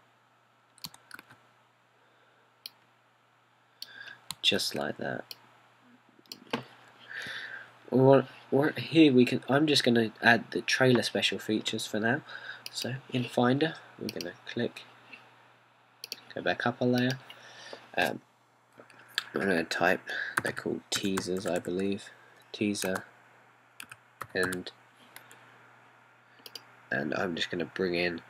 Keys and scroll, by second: 2.3 super+d, 5.7 super+d, 21.4-26.6 typing.